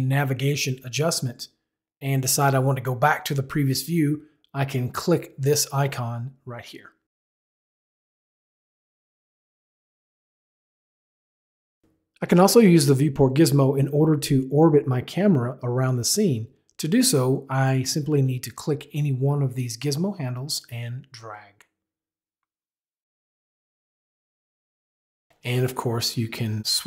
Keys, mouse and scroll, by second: 7.4 click, 9.4 click, 10.8 click, 11.9 click, 12.5 click, 18.7 click, 23.1 click, 24.7 click.